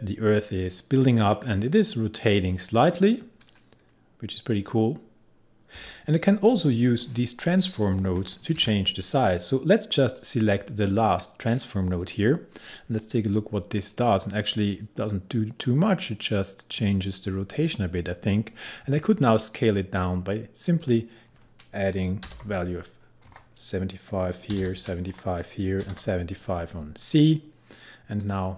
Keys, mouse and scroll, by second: 13.8 click, 20.7 click, 22.3 7, 23.3 Tab, 24.5 7, 25.1 Tab, 25.9 7, 27.0-28.5 drag.